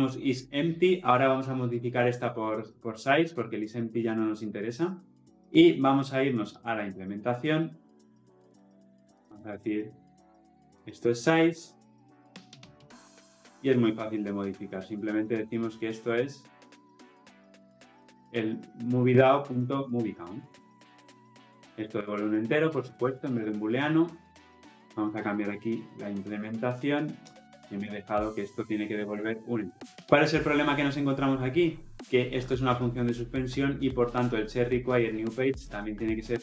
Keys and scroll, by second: 10.8 Return, 12.0 ctrl+z, 23.3 Escape, 28.0 ctrl+shift+i, 29.6 Escape.